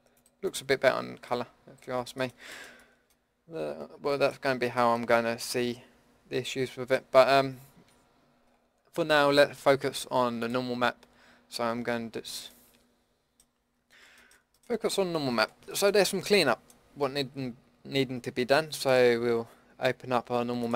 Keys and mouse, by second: 1.7 middle drag, 1.8-2.5 drag, 3.4 click, 10.4-12.6 middle drag.